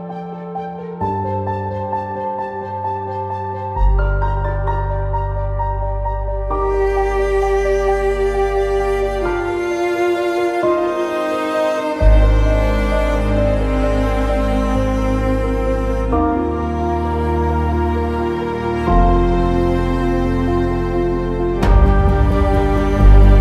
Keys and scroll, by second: 0.5 ctrl+z.